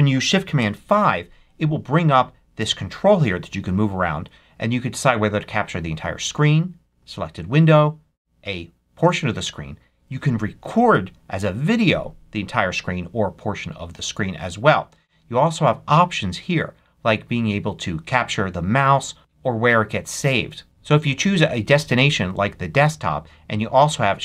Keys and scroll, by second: 0.5 shift+super+5.